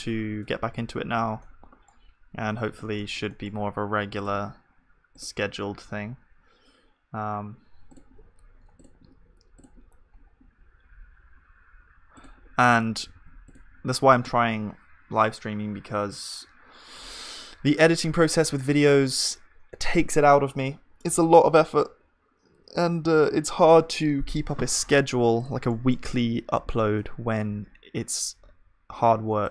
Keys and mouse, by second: 0.3 shift+a, 1.4-7.4 middle drag, 2.3 KP_1, 13.1 ctrl+s, 13.1-15.5 drag, 25.7-29.5 drag, 25.7-29.5 middle drag, 26.8 shift+a.